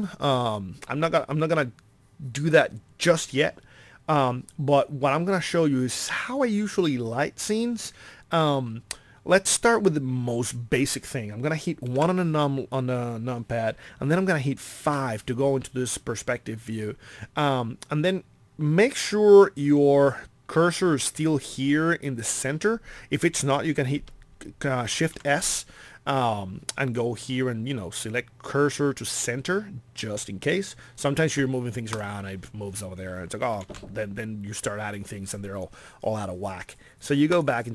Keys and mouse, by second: 12.0 KP_1, 14.8 KP_5, 19.7 a, 24.9 shift+s, 33.6 shift+s.